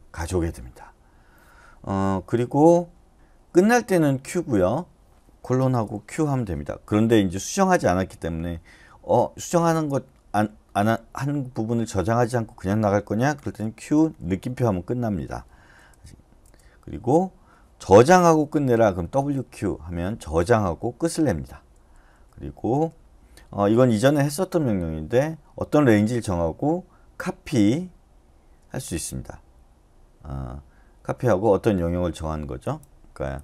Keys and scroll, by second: 5.7 typing, 6.1 Return, 13.4-14.2 typing, 15.8 BackSpace, 16.4 BackSpace, 18.1-19.7 typing, 21.7 BackSpace, 22.1 BackSpace, 22.7 BackSpace.